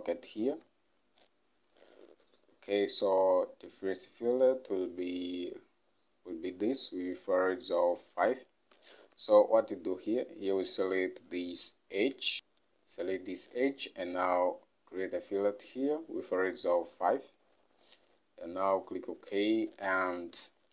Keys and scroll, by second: 0.6 ctrl+Tab, 9.1 ctrl+Tab, 17.3 5, 20.3 ctrl+Tab.